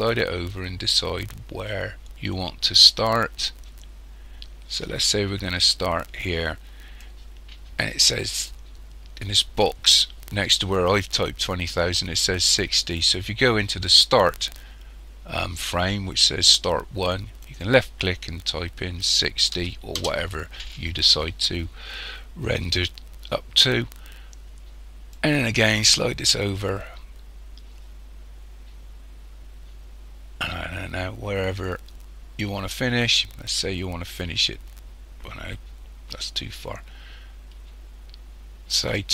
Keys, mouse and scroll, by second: 17.5 click, 25.2 click.